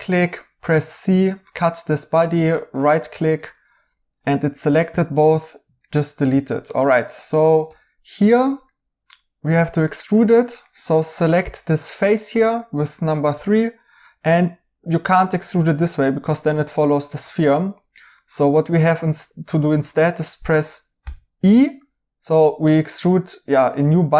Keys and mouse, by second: 0.5 c, 2.0 right click, 4.8 x, 5.8 right click, 7.0 right click, 7.6 3, 8.6 right click, 10.6 right click, 17.1 Escape, 17.5 right click, 20.9 e.